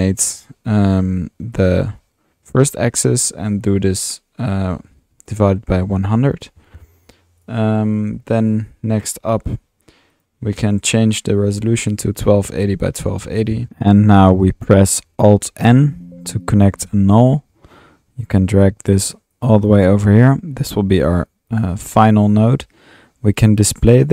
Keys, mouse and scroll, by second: 1.5-2.0 drag, 8.1 click, 10.1 click, 10.8 click, 13.4-14.2 typing, 13.8-14.4 drag, 15.6 alt+n, 16.5-18.0 alt+drag, 18.3 click, 19.3-19.7 drag, 21.5 click, 23.9 click.